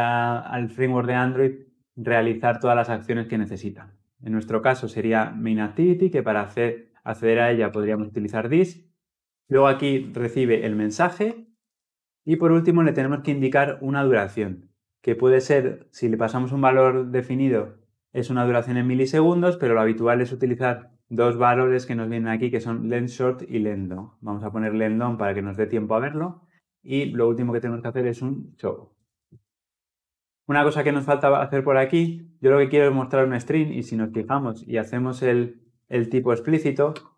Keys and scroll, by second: 9.2 ctrl+p, 12.4 Return, 34.3 alt+Return, 35.9 alt+Return, 36.7 Return.